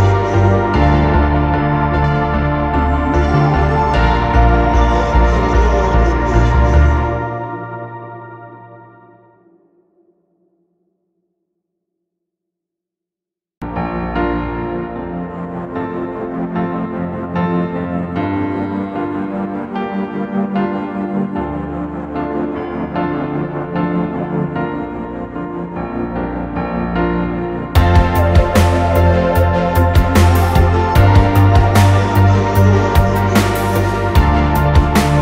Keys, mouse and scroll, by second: 0.3 scroll up 1, 0.5 middle click, 0.9 space, 1.1 space, 1.6 m, 3.2 Return, 3.6 scroll down 1, 3.7-4.7 typing, 12.1 scroll down 1, 12.3 middle click, 13.1 scroll up 1, 13.5 scroll down 1, 13.7 scroll up 1, 14.5 ctrl+z, 14.7 ctrl+z, 15.4 middle click.